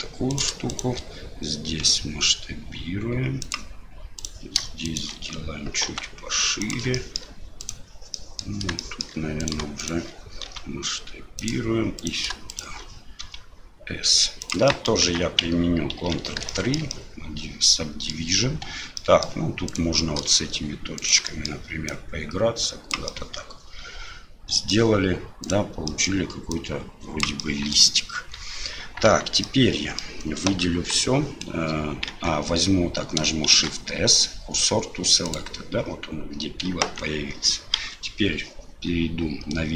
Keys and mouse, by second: 0.3 click, 0.7 shift+click, 4.2 click, 4.8 shift+right click, 7.0 shift+middle click, 7.6 right click, 8.1 middle click, 8.8 shift+middle click, 9.4 right click, 9.8 shift+right click, 12.0 right click, 12.5 shift+right click, 13.2 s, 14.8 middle click, 15.0 Tab, 15.9 ctrl+3, 16.5-16.8 shift+middle drag, 16.9-18.1 middle drag, 18.6 Tab, 19.0 middle click, 19.7 click, 20.0 middle click, 21.0 click, 21.2 middle click, 21.9-22.9 drag, 23.2-24.7 middle drag, 25.4 click, 25.9 middle click, 26.5 click, 27.5 middle click, 28.1 Tab, 29.0 Tab, 29.4 middle click, 30.7 KP_4, 32.1 Tab, 33.5 shift+s, 36.8 Tab, 37.8 KP_7.